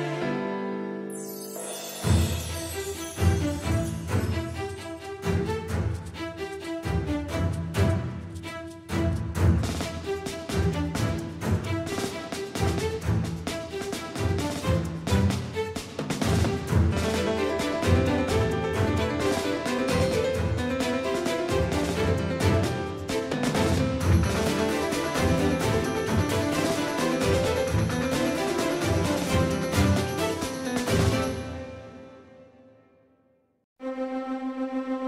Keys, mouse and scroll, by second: 0.3-4.3 middle drag, 7.6-10.3 middle drag, 15.9-18.0 middle drag, 18.0 shift+a, 21.5-23.7 drag, 24.2 middle click, 27.2 Tab, 29.1 w, 32.6 w.